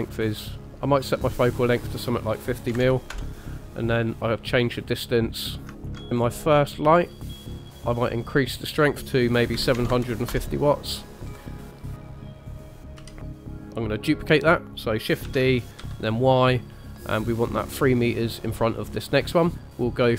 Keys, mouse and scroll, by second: 1.4 click, 4.5 click, 5.6 click, 6.5-7.4 scroll down 3, 7.4 click, 7.4 scroll down 1, 7.7 click, 8.9 click, 11.5 middle click, 11.9 click, 12.5 click, 12.8 middle click, 13.0 KP_3, 13.5 scroll down 2, 15.2 shift+d, 19.5 click.